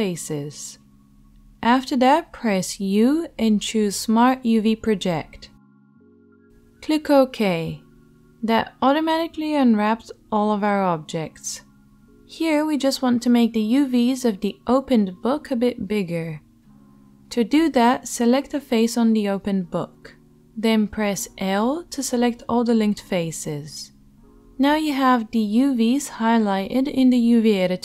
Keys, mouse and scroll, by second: 2.2 u, 17.8 click, 18.3-23.0 right drag, 21.0 l, 23.0-27.8 drag.